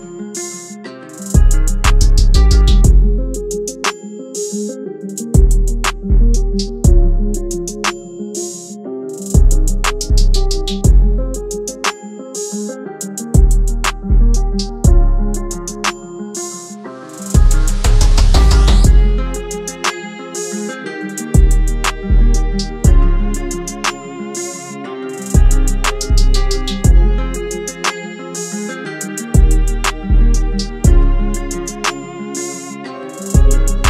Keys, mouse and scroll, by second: 2.2 double click, 12.5-13.5 typing, 17.3 typing, 18.4 typing, 19.7-20.6 typing, 24.9-25.9 typing, 26.7 double click.